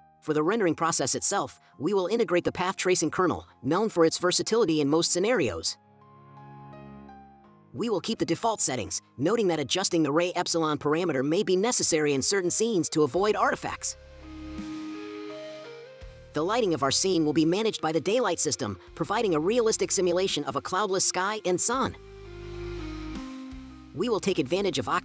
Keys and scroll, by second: 0.0-3.8 typing, 0.7 scroll, 1.9 scroll, 12.8 ctrl+z, 16.0-17.8 typing.